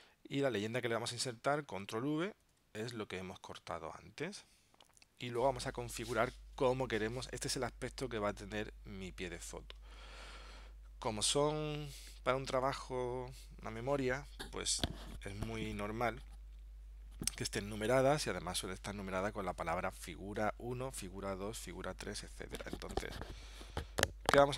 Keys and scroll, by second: 2.5 super+v.